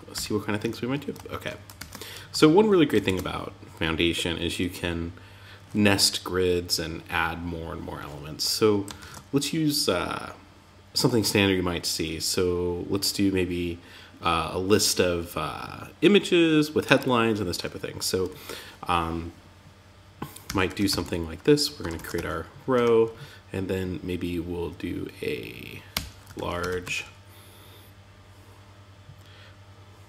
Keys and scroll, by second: 0.0 Tab, 1.1 super+s, 8.3 super+s, 21.3 shift+., 21.5 Tab, 22.1 Return.